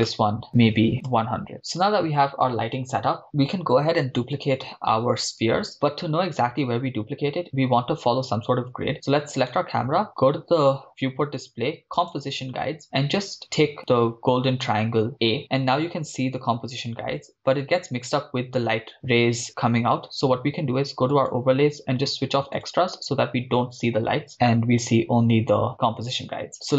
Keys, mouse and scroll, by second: 0.1 KP_0, 0.5-1.5 drag, 0.9 0, 9.6 right click, 10.9-11.6 scroll down 2, 11.6 scroll down 2, 12.0 click, 12.5-13.4 scroll down 3, 14.9 click, 21.1-23.0 drag.